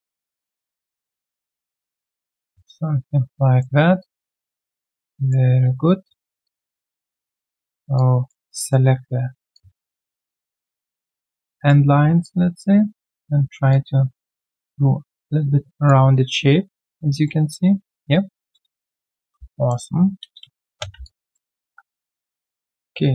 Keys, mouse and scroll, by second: 1.9 alt+right click, 2.3 alt+middle click, 4.7 shift+click, 5.0 shift+right click, 6.4 shift+click, 8.5 alt+shift+right click, 9.5 ctrl+click, 11.2 ctrl+click, 12.2 ctrl+click, 16.1 alt+right click, 17.2 alt+middle click, 18.4 q, 19.4 right click, 19.9 alt+scroll down 1, 20.2 space, 20.7 space, 21.0 alt+click.